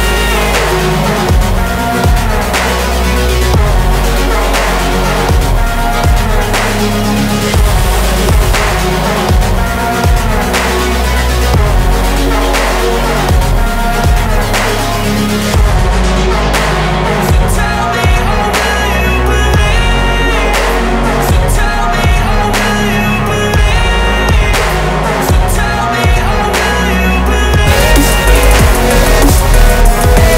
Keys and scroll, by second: 0.6 Delete, 6.7 Escape, 7.9 ctrl+z.